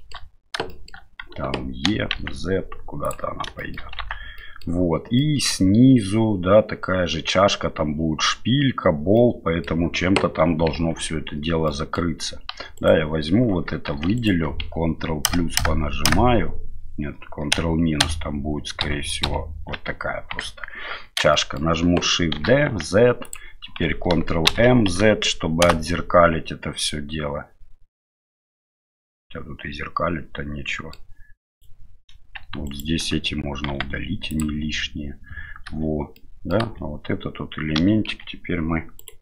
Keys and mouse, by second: 0.7 shift+middle click, 1.9 e, 3.6 shift+middle click, 4.0 Tab, 4.4 middle click, 5.2 middle click, 9.2-9.7 middle drag, 10.8 Tab, 11.7 middle click, 13.9 3, 15.3 ctrl+KP_Add, 15.6 ctrl+KP_Add, 16.1 ctrl+KP_Add, 17.5 ctrl+KP_Divide, 18.0 ctrl+KP_Divide, 18.9 ctrl+KP_Subtract, 19.3 ctrl+KP_Subtract, 20.4 KP_1, 21.3 shift+middle click, 22.4 shift+d, 24.5 ctrl+m, 26.9-30.9 middle drag, 31.5 right click, 32.7 alt+right click, 33.7 x, 35.7 a, 36.1 middle click, 36.6 a, 37.8 k.